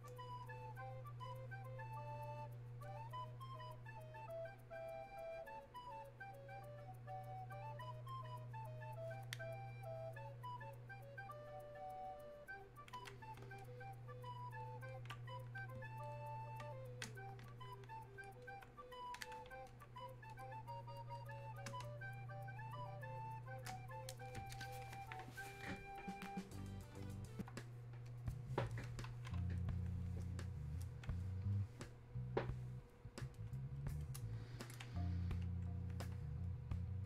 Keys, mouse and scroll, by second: 18.5-21.9 alt+drag, 21.9 space, 22.6 click, 22.7 space, 23.6 space, 30.1-35.3 drag, 35.6-37.0 drag.